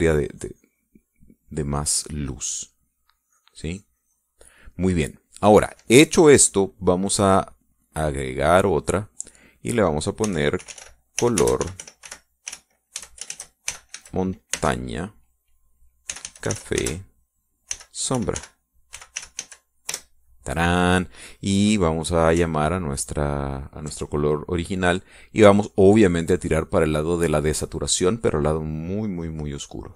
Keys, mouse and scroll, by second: 2.5 click, 3.0 middle click, 3.3 click, 3.9-5.5 drag, 5.5 middle click, 5.7 click, 6.2-9.5 middle drag, 9.5 click, 9.8 middle click, 10.3 click, 10.7 middle click, 11.0-15.6 typing, 16.9-21.0 typing, 24.0 ctrl+click, 26.3-29.9 drag.